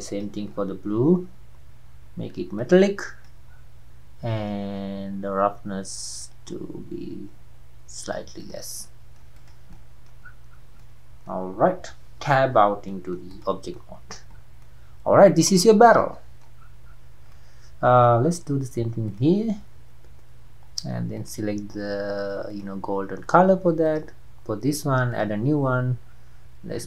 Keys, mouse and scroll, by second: 0.1 click, 0.5-2.7 scroll down 4, 2.7-5.0 drag, 5.0-6.3 scroll down 4, 6.3-8.6 drag, 8.9-9.3 middle drag, 9.3 click, 9.7-10.3 middle drag, 10.3-10.8 scroll up 5, 10.8-12.4 middle drag, 12.4 Tab, 12.6 scroll down 4, 12.9-13.2 middle drag, 13.2 scroll up 1, 13.3 click, 13.8-14.3 middle drag, 14.3 scroll up 1, 14.3-14.7 scroll down 4, 14.7-15.8 middle drag, 15.8 scroll up 1, 15.9-16.6 middle drag, 16.6-17.2 scroll up 5, 17.2 scroll down 1, 17.4-18.2 middle drag, 18.2 scroll up 2, 19.2 click, 22.6-24.0 drag, 25.2-26.8 drag.